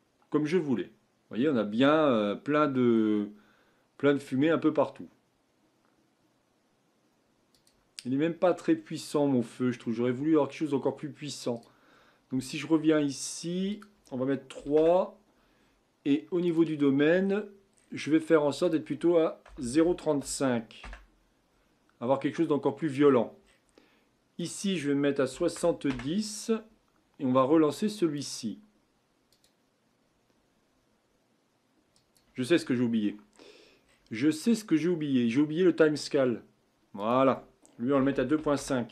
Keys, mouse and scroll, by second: 2.6-3.3 scroll up 4, 7.9 click, 8.0-8.4 scroll down 4, 8.4-10.0 middle drag, 10.0-11.5 scroll up 4, 11.5 click, 13.7-16.6 drag, 17.2-18.0 scroll down 13, 18.6-21.7 drag, 22.0-23.0 scroll down 4, 23.0-24.4 scroll up 15, 24.4-27.4 drag, 28.1-33.8 drag, 33.8-35.3 scroll up 7, 37.0-38.9 drag.